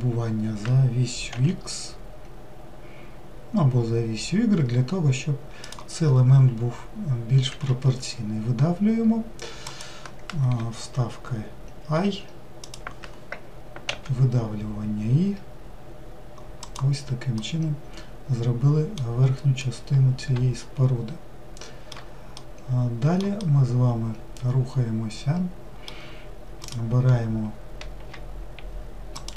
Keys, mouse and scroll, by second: 17.4-26.4 middle drag, 26.6 click, 29.2 ctrl+shift+click.